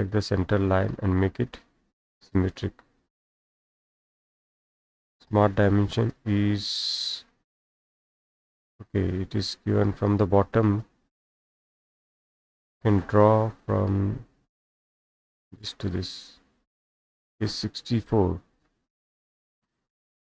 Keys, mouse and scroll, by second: 3.9 click, 4.5 click, 6.1 click, 6.9 click, 9.0 click, 9.3 Escape, 9.4-10.1 scroll, 9.5 Escape, 10.1-10.4 scroll up 1, 10.8 click, 11.3 Delete, 11.5-12.1 scroll down 3, 13.3 click, 14.9 click, 15.9 click, 16.1 middle click, 16.1-16.4 scroll, 17.0 click, 18.0-18.8 typing, 19.4 scroll down 1, 19.4 scroll down 1, 19.6-20.0 scroll down 1, 19.8 scroll, 20.0 scroll down 1.